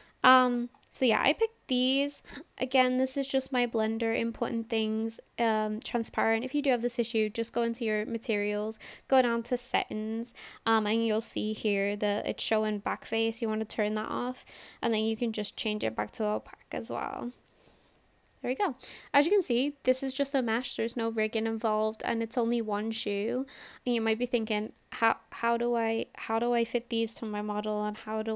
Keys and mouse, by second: 0.9-1.4 middle drag, 1.9 click, 12.8-15.8 drag, 16.5-18.8 middle drag, 19.4-24.1 middle drag.